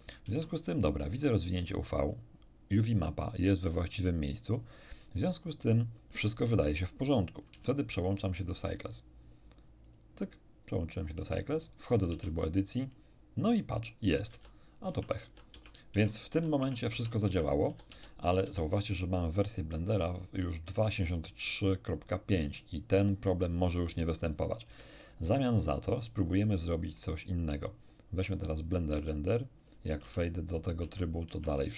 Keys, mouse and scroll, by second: 0.2 Tab, 7.5 Tab, 8.6 click, 9.8 click, 11.6 click, 12.1 Tab, 14.3 a, 14.9 Tab, 15.2 a, 15.5 Tab, 16.3 a, 16.5 Tab, 17.2 Tab, 17.6 a, 17.9 a, 18.4 a, 24.6 Tab, 25.6 middle click, 27.1 click, 27.8 click, 28.9 Tab, 30.0 Tab, 30.8 Tab, 31.3 Tab.